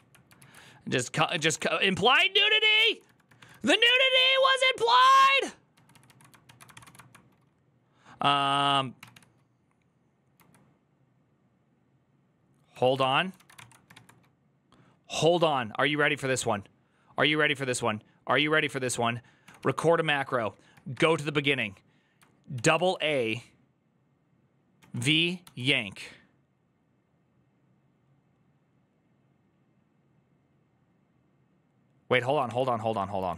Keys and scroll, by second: 1.3-5.5 typing, 4.6 ctrl+a, 6.2 ctrl+a, 6.5 ctrl+c, 6.6 typing, 8.5-10.1 typing, 12.5 typing, 12.8 ctrl+c, 13.1 ctrl+x, 13.7 _, 22.1-22.8 typing, 24.6-25.7 typing, 32.0-33.3 typing.